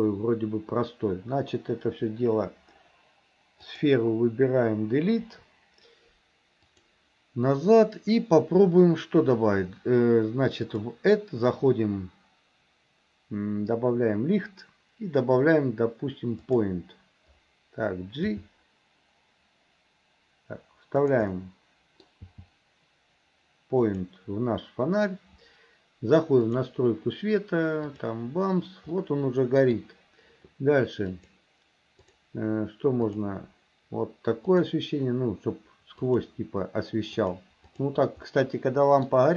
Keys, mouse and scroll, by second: 3.7 click, 6.9 click, 10.7-16.7 drag, 21.3 middle click, 26.5 click, 29.0 middle click, 31.2 click, 32.1 click, 33.1 click, 34.5 click, 36.1 click, 37.2 click, 37.7 click, 38.4 middle click.